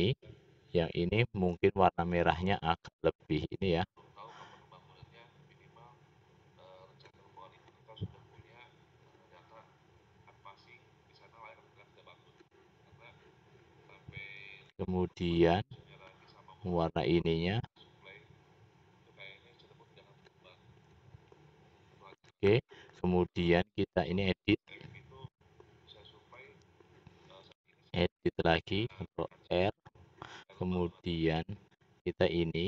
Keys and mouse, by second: 1.7-3.6 drag, 14.3 click, 16.1 click, 17.5 click, 28.5 ctrl+r, 29.8-31.1 drag, 32.2 click.